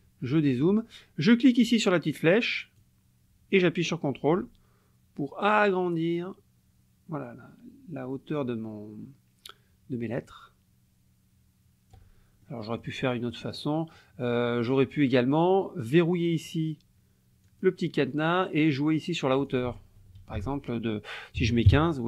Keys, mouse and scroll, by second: 0.3 click, 2.8-12.1 drag, 12.4 ctrl+click, 13.2 click, 17.5 click, 19.5 click, 20.4 ctrl+a, 21.4 KP_1, 21.5 KP_5, 21.7 KP_Enter.